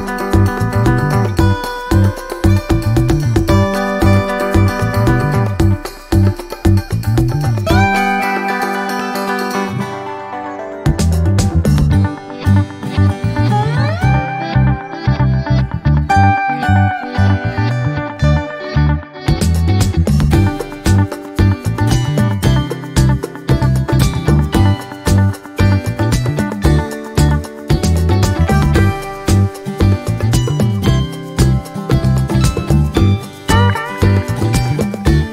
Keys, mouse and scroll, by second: 1.2-1.5 ctrl+scroll up 2, 1.8-3.5 ctrl+drag, 4.1 click, 4.6-5.0 scroll up 2, 5.1 ctrl+click, 5.9-6.2 ctrl+scroll down 2, 6.7 ctrl+click, 7.2 ctrl+click, 8.0 Delete, 8.9 click, 9.4 shift+click, 13.0 ctrl+d, 13.7 ctrl+click, 21.5 click, 22.2 click, 23.0 Down, 26.5 click, 27.4 click, 27.9-28.3 ctrl+scroll down 2, 28.7 scroll down 1, 28.8-29.2 scroll up 3, 29.4 ctrl+click, 30.4 click, 32.3 Delete, 33.9 ctrl+a.